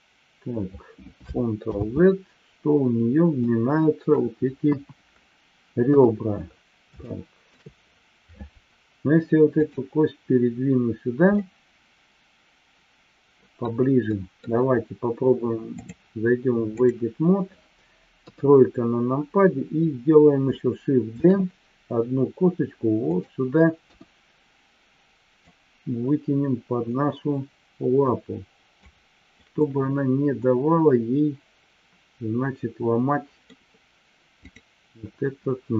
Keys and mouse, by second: 2.1 ctrl+z, 3.4-4.1 middle drag, 4.6 KP_1, 7.0-7.5 shift+middle drag, 9.6-10.2 drag, 11.4-13.6 middle drag, 14.1-14.5 middle drag, 15.7-17.2 drag, 18.2 KP_3, 21.2 shift+d, 23.1 click, 23.8 KP_1, 25.5-28.7 drag, 29.4-33.4 middle drag.